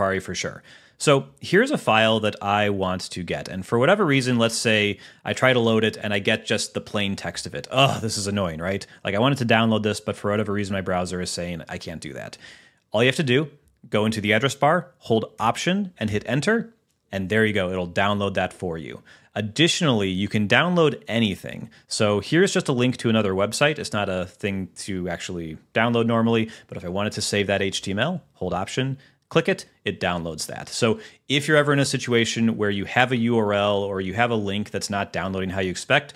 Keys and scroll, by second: 16.5 alt+Return.